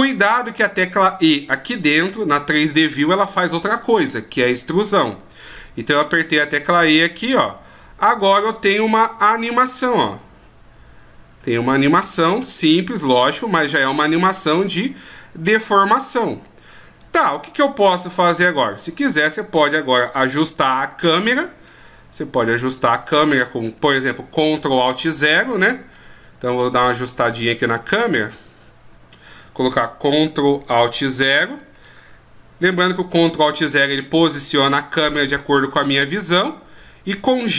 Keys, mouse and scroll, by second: 6.9 click, 17.0 click, 18.4 middle click, 20.3 KP_0, 23.1 middle click, 24.5-25.0 shift+scroll up 1, 25.0-25.5 shift+scroll down 2, 25.9 middle click, 25.9 scroll down 2, 27.0 shift+scroll up 1, 27.7 scroll down 1, 28.3 shift+scroll up 1, 28.6-29.2 shift+scroll down 1, 31.2 ctrl+alt+KP_0, 32.9 right click, 34.2 g.